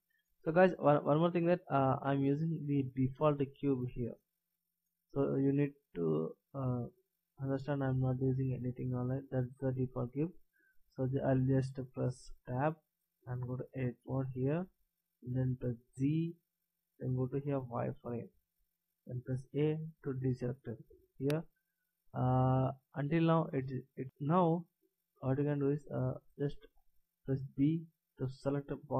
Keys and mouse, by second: 12.5 Tab, 16.3 z, 19.3 a, 27.3 b.